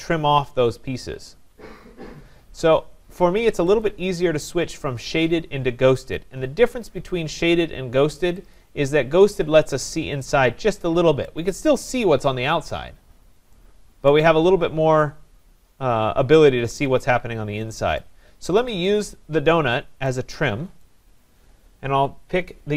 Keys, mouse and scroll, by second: 3.8 click, 8.6 click, 9.1 scroll down 4, 9.7 scroll, 9.7 scroll up 4, 11.3 right click, 14.1 right click, 18.0 right click, 19.0 click, 20.8 right click.